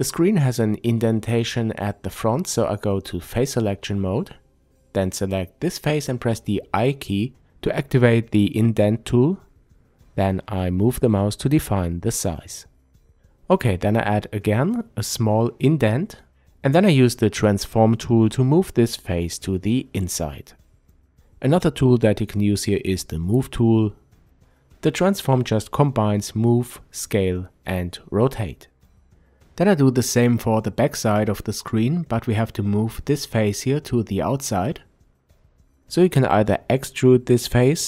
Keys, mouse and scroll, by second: 1.0 click, 1.8 click, 7.8 click, 8.6-11.4 scroll up 1, 15.3 click, 16.8 click, 18.5-24.4 drag, 23.3 Tab, 24.4-27.1 middle drag, 27.3-28.9 middle drag, 28.5 Tab, 30.5 click, 32.5 i, 33.9 click, 34.7-36.1 drag, 36.1-37.4 middle drag, 37.4-37.8 drag.